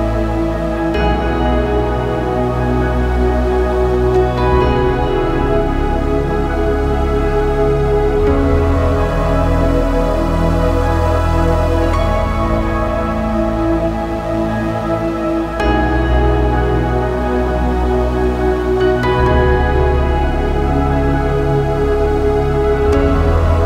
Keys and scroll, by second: 2.6 ctrl+c, 4.2 e, 4.5 space, 5.3 ctrl+v, 7.4 ctrl+c, 8.1 ctrl+v, 10.3 3, 12.2 ctrl+c, 13.3 ctrl+v, 15.5 4, 16.3 ctrl+v, 18.1 5, 19.8 ctrl+v, 21.3 6, 22.7 ctrl+v.